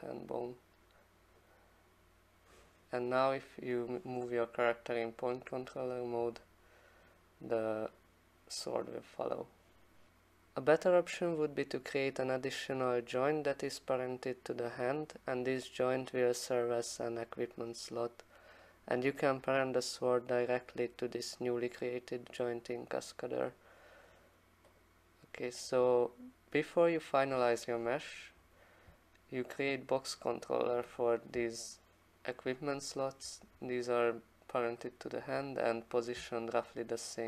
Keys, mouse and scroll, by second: 1.4 click, 3.8 click, 5.1 click, 5.3 click, 6.3 e, 10.6 click, 24.8 click, 29.7 shift+click, 36.2 click, 36.3 alt+middle click, 36.5 alt+middle click.